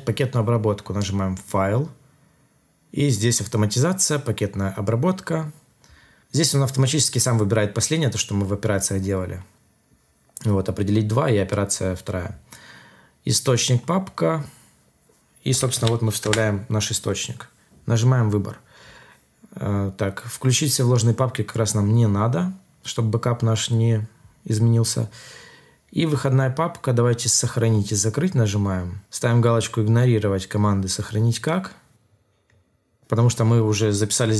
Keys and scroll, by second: 15.7 ctrl+v, 16.2 Return.